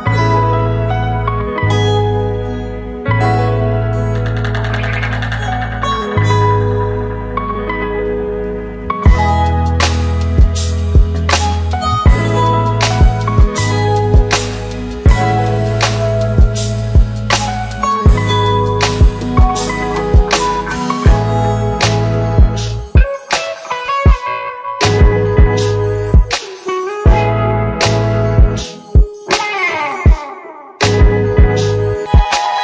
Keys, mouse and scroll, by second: 6.1 Left, 13.1 click, 19.4 click, 21.9-24.9 click, 26.5 ctrl+d, 27.5-27.9 click, 31.6 click.